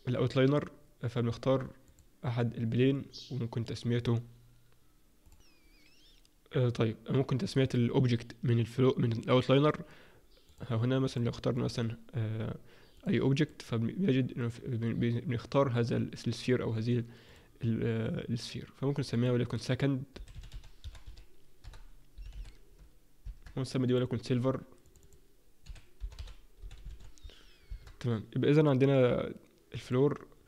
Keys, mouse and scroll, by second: 11.2 click, 11.6 click, 13.3 click, 13.7 click, 17.3 click, 26.1 click, 29.9 click.